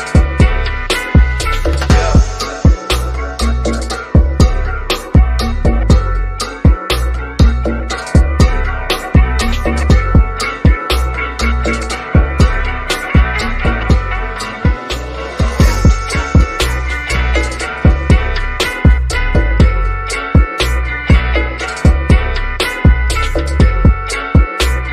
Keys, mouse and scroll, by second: 0.5-0.9 scroll down 1, 2.0 click, 4.2 ctrl+l, 5.7 scroll down 1, 14.7 click, 14.7 scroll up 1, 14.8 click, 16.6-16.9 scroll up 1, 17.9 ctrl+a, 18.9 click, 18.9 click, 20.9-22.3 scroll down 1, 23.8 click.